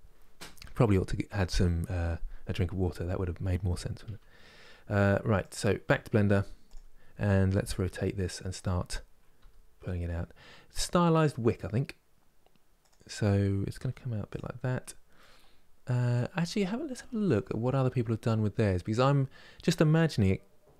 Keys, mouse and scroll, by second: 2.5-5.1 scroll down 1, 5.1 click, 5.5 KP_3, 6.4-7.5 drag, 7.5 r, 14.5 scroll up 2, 14.9-20.7 middle drag.